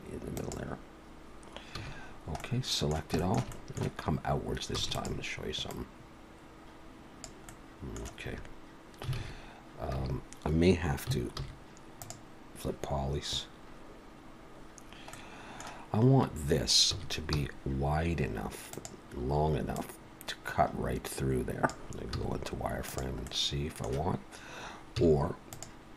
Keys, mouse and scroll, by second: 1.7 a, 2.1-2.4 scroll down 3, 2.4 middle click, 3.2 shift+middle click, 3.5 middle click, 4.7 e, 5.7 click, 7.4 middle click, 8.2 a, 9.2 alt+a, 9.9 a, 11.4 alt+n, 15.0 middle click, 16.9 s, 19.8 click, 22.1 z, 23.3 middle click, 25.0 z.